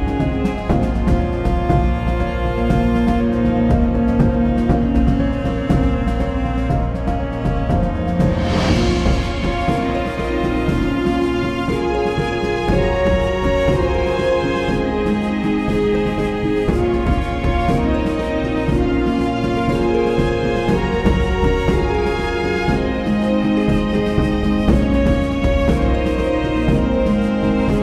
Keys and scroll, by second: 12.6 [.